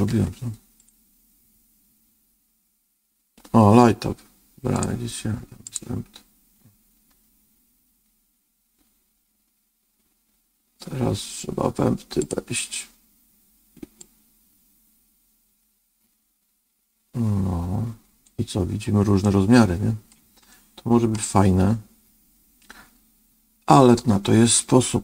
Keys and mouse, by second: 0.0 ctrl+z, 4.6-5.7 drag, 12.1 click, 14.0-18.2 drag, 19.2 middle click, 20.4 middle click.